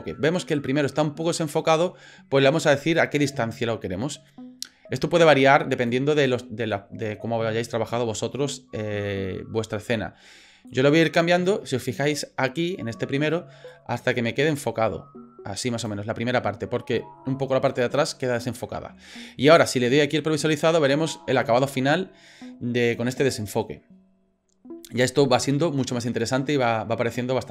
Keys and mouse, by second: 3.4-5.9 drag, 10.7 click, 13.7-15.9 drag, 19.6-20.9 drag.